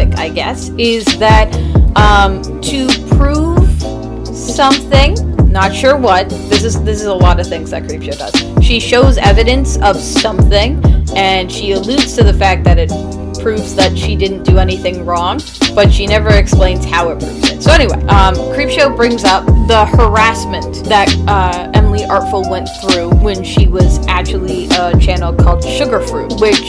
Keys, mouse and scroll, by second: 0.7 space, 1.0 e, 7.1 e, 9.2 right click, 11.6 p, 11.8 [, 24.6-26.6 typing.